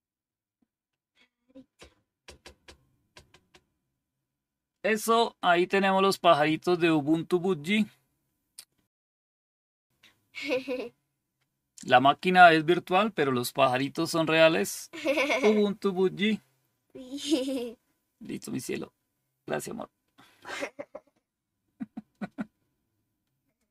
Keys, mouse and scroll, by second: 8.9 click.